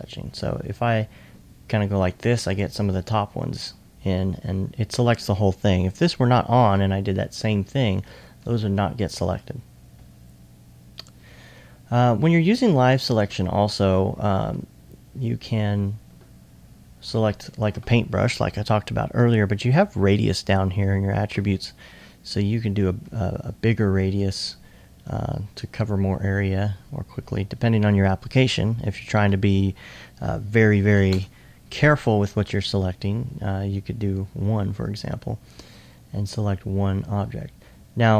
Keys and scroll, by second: 13.5 typing, 14.7-15.4 typing, 31.1 typing.